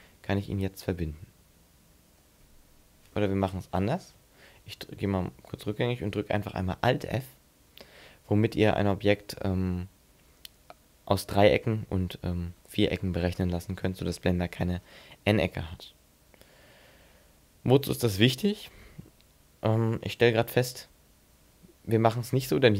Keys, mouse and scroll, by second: 0.6 middle click, 1.6-2.1 scroll up 3, 4.8 ctrl+z, 7.0 alt+f, 8.1 middle click.